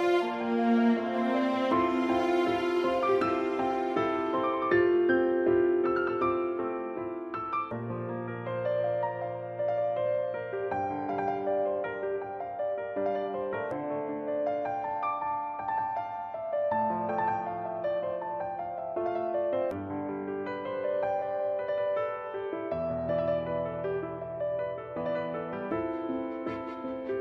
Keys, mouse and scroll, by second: 1.4 click, 2.5 right click, 3.3 b, 5.8 a, 6.5 b, 7.9 s, 10.4 click, 10.8 middle click, 11.1 a, 11.5 alt+right click, 11.7 middle click, 13.6 s, 15.5 click, 15.7 middle click, 18.0 click, 19.0 middle click, 20.3 click, 21.6 a, 22.0 alt+right click, 22.7 s, 24.1 click, 24.8 click, 25.6 middle click.